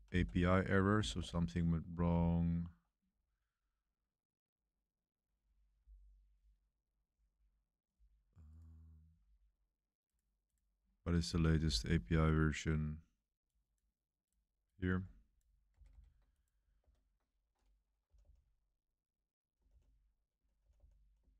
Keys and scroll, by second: 0.1 Down, 0.6 Up, 1.1-3.7 typing, 15.7 super+c, 15.8 super+c, 16.7 super+3, 18.0 typing, 19.6-21.3 typing.